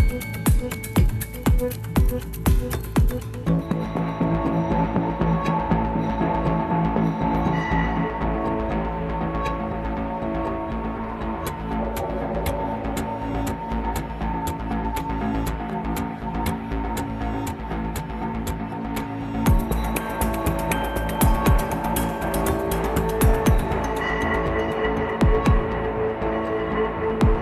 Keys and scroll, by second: 0.1 ctrl+c, 0.3 ctrl+v, 4.3 Right, 4.6 Right, 5.1 Right, 13.0 ctrl+c, 15.7 ctrl+v.